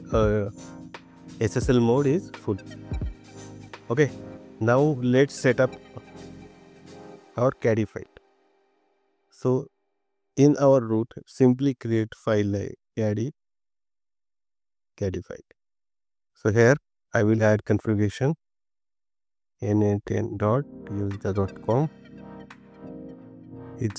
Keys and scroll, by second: 10.6 BackSpace, 13.8 BackSpace.